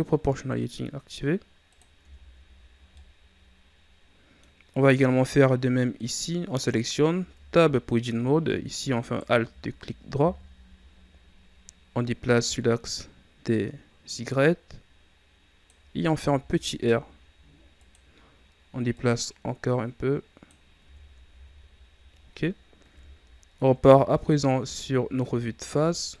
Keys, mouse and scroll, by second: 1.9 Tab, 2.8-4.6 middle drag, 4.6-5.8 scroll up 1, 5.8 scroll up 1, 5.9 right click, 7.1 Tab, 8.9 alt+right click, 10.2 KP_3, 12.0-15.0 drag, 16.1 r, 18.8-20.7 drag, 20.7 Tab, 21.2 a, 21.7 scroll down 2, 22.8 KP_1, 24.3-26.2 scroll down 3.